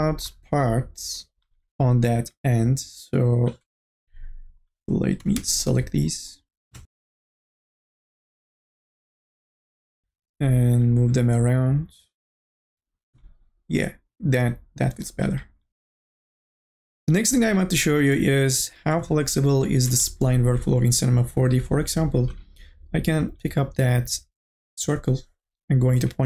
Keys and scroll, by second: 5.2 4, 5.5 e, 24.8 1.